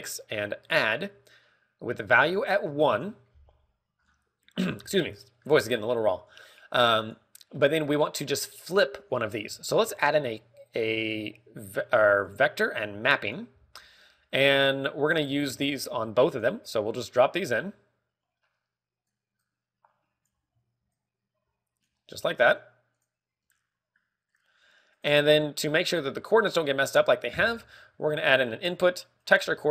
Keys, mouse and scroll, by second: 0.7 click, 2.8 ctrl+click, 2.9 ctrl+click, 4.9 scroll down 6, 6.1 middle click, 6.4 scroll up 3, 7.2 click, 8.4 middle click, 10.5 shift+a, 14.4 g, 16.0 click, 16.3 shift+d, 17.2 click, 19.9 ctrl+click, 20.3 click, 20.3 ctrl+click, 21.8 click, 21.9 ctrl+click, 26.9 click, 27.3-27.9 scroll down 4, 27.6 middle click, 27.9-28.6 scroll up 2, 28.4 shift+a.